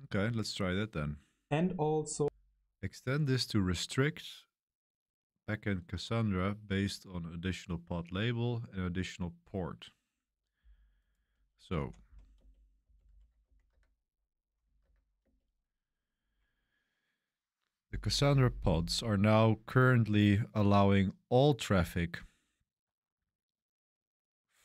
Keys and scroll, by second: 2.0 space, 11.7-13.5 typing, 13.6 Tab, 14.5 ., 14.7 Tab, 15.1 Return.